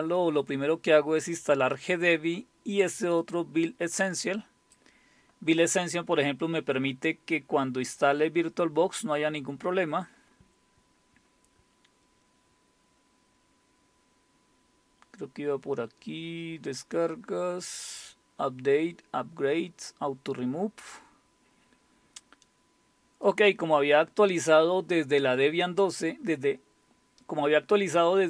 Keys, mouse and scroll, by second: 3.2-5.4 drag, 10.0-13.5 scroll down 5, 13.5-14.3 scroll down 1, 14.3-15.2 scroll down 1, 15.2-16.9 scroll down 2, 16.9-17.8 scroll down 1, 17.8-19.3 scroll down 1, 19.3-21.8 scroll down 1, 23.3-27.5 drag.